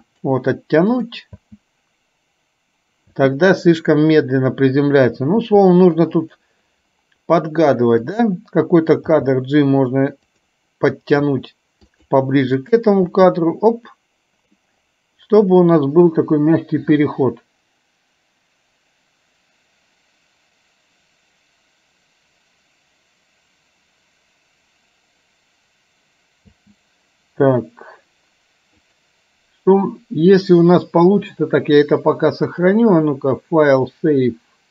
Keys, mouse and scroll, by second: 1.0 click, 1.5 space, 3.2 space, 5.5 g, 11.3 g, 12.7 click, 13.0 space, 26.5 space, 28.9 click.